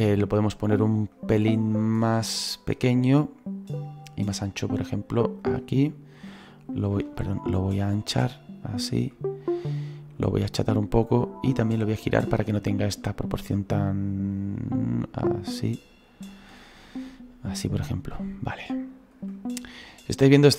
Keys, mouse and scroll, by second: 3.0 scroll down 2, 3.7 right click, 5.0-7.1 drag, 7.1 ctrl+z, 7.6-16.4 drag, 17.0-19.2 middle drag, 19.2-20.5 drag.